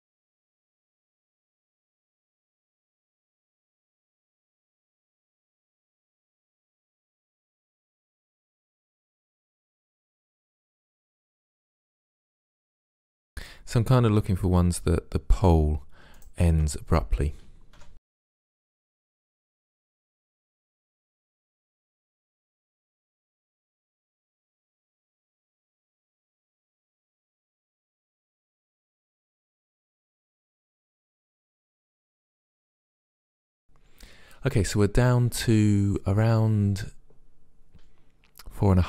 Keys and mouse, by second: 0.3 right click, 0.5 click, 1.0 Delete, 2.5 right click, 2.7 middle click, 3.5 Delete, 3.7 middle click, 4.1 middle click, 4.3 right click, 4.5 middle click, 5.4 click, 5.6 right click, 5.7 Delete, 7.3 middle click, 7.8 Delete, 8.6 Delete, 9.1 click, 9.3 right click, 10.0 Delete, 10.2 click, 11.2 click, 11.7 Delete, 12.0 click, 12.5 Delete, 12.8 click, 13.3 Delete, 16.2-18.0 right drag, 17.8 Delete, 18.4 middle click, 18.8 right click, 19.6 right click, 20.1 Delete, 21.3 middle click, 22.4 click, 22.7 Delete, 23.0 middle click, 24.3 middle click, 24.5 right click, 24.9 middle click, 25.1 Insert, 25.1 Delete, 25.3-26.5 middle drag, 26.5 right click, 27.3 right click, 28.3 Delete, 29.7 a, 29.8 a, 30.6 middle click.